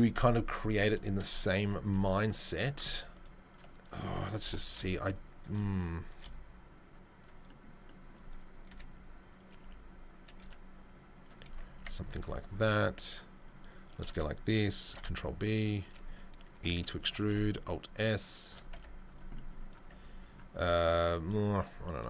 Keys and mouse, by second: 1.9 4, 2.1 click, 2.2-3.4 middle drag, 3.4 click, 3.6-21.0 middle drag, 4.4 i, 6.1 e, 8.7 e, 9.6 s, 10.4 e, 11.7 Tab, 12.1 ctrl+r, 14.8 ctrl+b, 16.5 e, 17.2 alt+s, 18.7 Tab, 19.9 Tab, 21.0 right click, 21.6-22.0 middle drag.